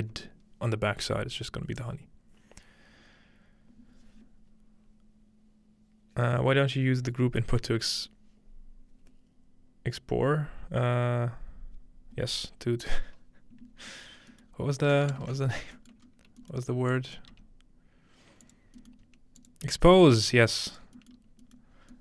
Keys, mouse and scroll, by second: 14.3 middle click, 14.5-16.0 scroll down 2, 15.4 ctrl+space, 16.0-18.0 scroll up 2, 16.9 click, 17.3 g, 18.4 click, 19.0-20.0 scroll up 2, 19.3-22.0 drag, 19.3-20.8 middle drag, 20.0-20.8 scroll up 1, 21.2 middle click, 21.3-21.7 scroll up 2, 21.5 middle click, 21.7 scroll down 2.